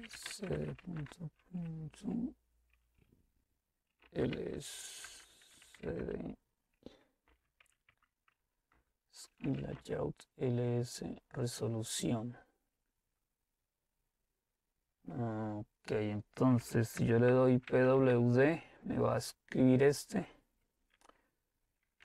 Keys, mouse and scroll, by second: 0.0-1.0 typing, 2.4-6.1 typing, 7.3-10.0 typing, 16.4-18.0 typing.